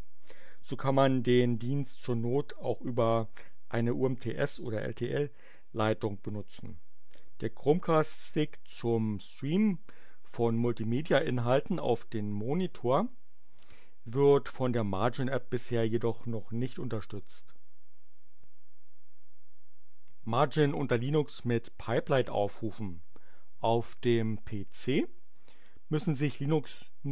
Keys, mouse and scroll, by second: 24.6 click.